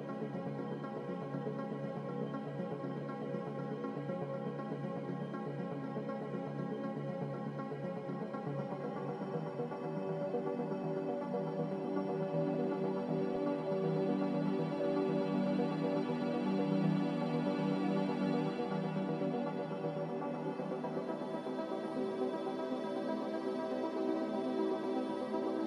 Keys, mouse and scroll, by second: 0.1 1, 4.1 5, 11.2 5, 12.8 click, 18.0 click, 20.8 z, 22.1-22.9 typing, 25.0-25.6 typing.